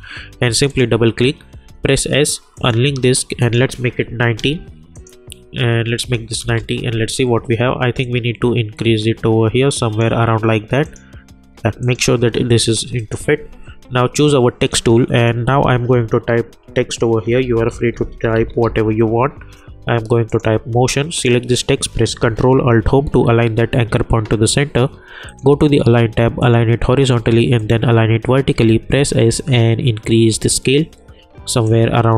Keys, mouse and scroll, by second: 0.5 click, 6.4 Return, 8.0-13.0 drag, 17.1-19.1 typing, 20.3 click, 23.0 ctrl+alt+Home, 25.2 click, 28.5 s, 29.4-32.1 drag.